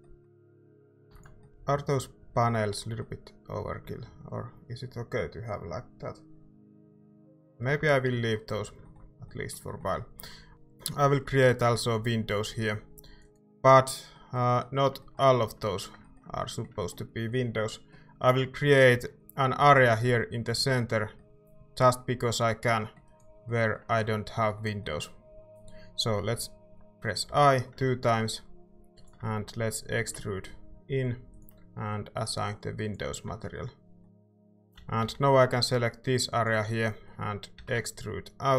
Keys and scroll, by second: 0.3 typing, 1.1 ctrl+s, 7.8 Tab, 8.5 a, 10.5 c, 18.9 c, 26.3 i, 27.2 i, 30.0 e, 33.3 Tab, 34.3 Tab, 34.6-35.5 typing, 37.6 e.